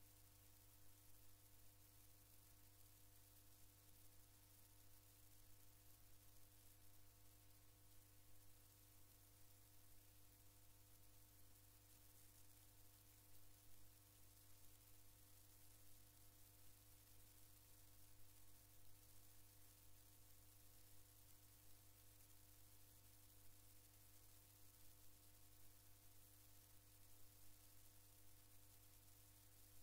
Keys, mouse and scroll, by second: 10.1-12.0 drag, 16.0-18.1 drag, 19.2-21.5 drag, 22.4-24.6 drag, 26.5 click, 28.1 click.